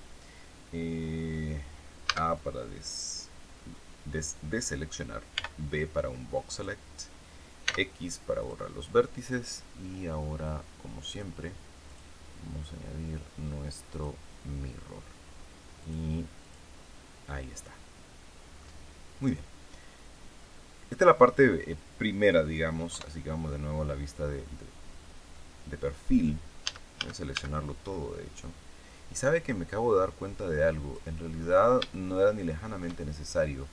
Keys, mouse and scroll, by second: 2.0 a, 5.3 b, 5.7-6.7 drag, 7.5 x, 8.3 click, 11.0 click, 11.8 click, 13.9 click, 15.7 click, 16.3 click, 17.9-18.3 scroll down 1, 18.5-21.3 middle drag, 22.9 KP_3, 26.6 a, 28.3-31.1 drag, 31.3-31.7 scroll up 2, 31.9-32.9 shift+middle drag.